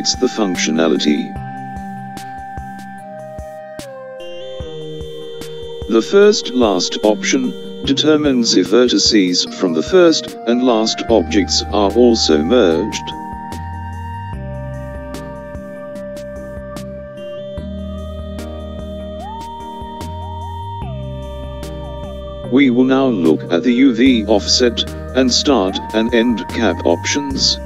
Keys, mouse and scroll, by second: 1.0 click, 10.3 click, 19.8 n.